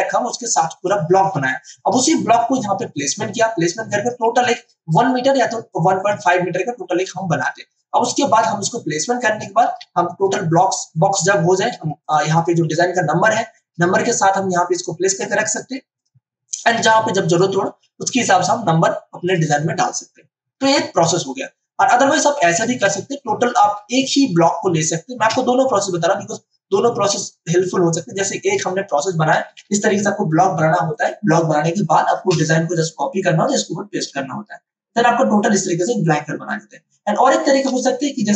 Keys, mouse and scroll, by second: 2.0 space, 2.2 click, 2.5 space, 4.5 ctrl+alt+click, 5.7-9.6 drag, 9.6 ctrl+d, 11.8 space, 12.0-14.6 ctrl+drag, 16.9 space, 17.2 ctrl+click, 17.3 ctrl+click, 22.7 space, 23.0 ctrl+alt+click, 24.3-29.6 drag, 29.4 ctrl+space, 30.9-37.7 drag, 37.7 space, 38.0 click, 38.2 space.